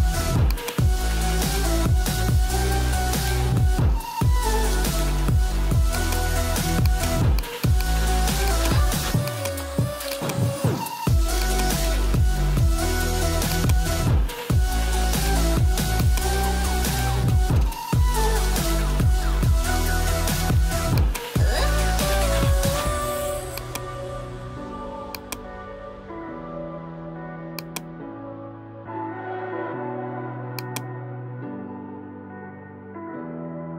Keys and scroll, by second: 31.8 ].